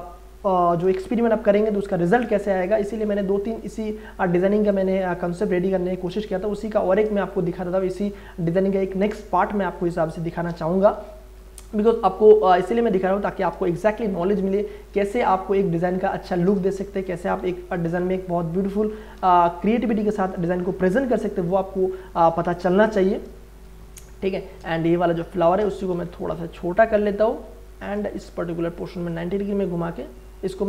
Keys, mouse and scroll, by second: 1.0 ctrl+space, 1.1-5.7 ctrl+drag, 5.7-7.1 drag, 7.1 ctrl+space, 7.3 ctrl+click, 7.6 ctrl+space, 9.8 alt+click, 10.9 ctrl+t, 10.9 ctrl+click, 11.6-13.0 ctrl+drag, 13.0 ctrl+Return, 13.8 ctrl+space, 13.9-15.3 ctrl+drag, 15.3 ctrl+click, 17.4 ctrl+t, 18.3 alt+shift+click, 19.3 click, 20.5 Return, 21.8-23.8 drag, 23.8 space, 24.0 ctrl+click, 25.0 alt+click, 25.9 ctrl+t, 26.7-28.1 alt+drag, 28.1 Right, 28.1 shift+right click, 29.1-30.6 drag.